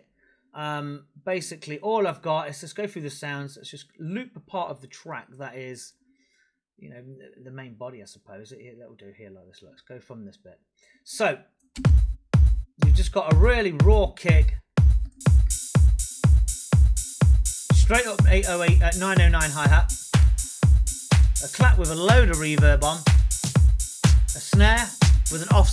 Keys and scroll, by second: 11.7 space.